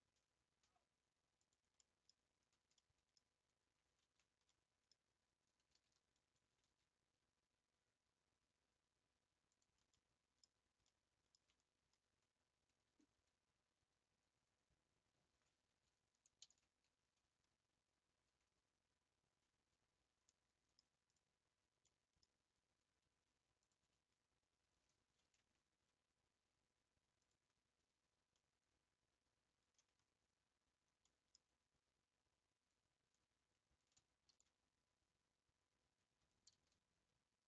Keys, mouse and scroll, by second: 1.8 middle click, 2.1 scroll down 2, 2.7-4.0 middle drag, 4.0 ctrl+z, 4.5 middle click, 5.4-5.8 scroll up 1, 6.5 g, 10.0 middle click, 10.4 scroll down 3, 10.9 middle click, 11.3 Tab, 11.6-12.1 scroll down 1, 12.1 Tab, 13.1 a, 13.4 scroll down 2, 14.1-14.5 scroll up 1, 14.5 Tab, 16.4 ctrl+i, 18.8 Tab, 19.8 Tab, 20.3-21.1 middle drag, 21.1 click, 21.7 scroll up 1, 21.8-22.3 middle drag, 22.3 scroll up 4, 23.7 shift+click, 27.5 ctrl+p, 28.3-29.8 middle drag, 29.8 scroll up 1, 30.0-30.7 scroll down 11, 31.0-37.4 middle drag.